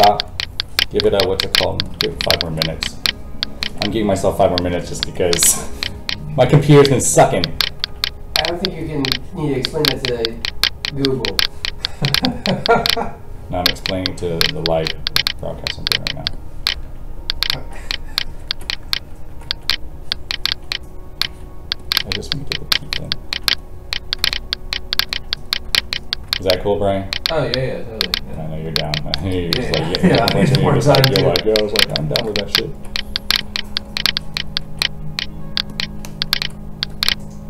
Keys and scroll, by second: 4.8 ctrl+d, 6.6 alt+a, 19.2 ctrl+d, 21.2 alt+a.